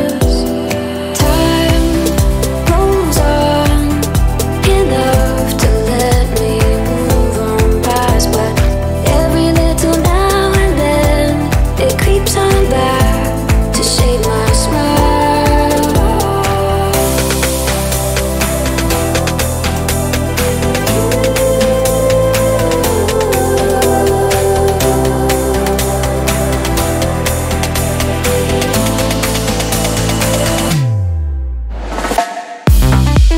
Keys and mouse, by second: 0.7 x, 0.8-1.9 middle drag, 1.9 click, 2.5-3.5 ctrl+middle drag, 3.5-6.0 drag, 6.0-7.1 middle drag, 7.1-8.4 drag, 8.4-12.3 middle drag, 12.3 click, 12.8 click, 13.9-17.1 drag, 20.3 middle click, 21.0 click, 21.9-24.8 drag, 25.2-27.5 middle drag, 27.5 click, 28.9-33.3 drag.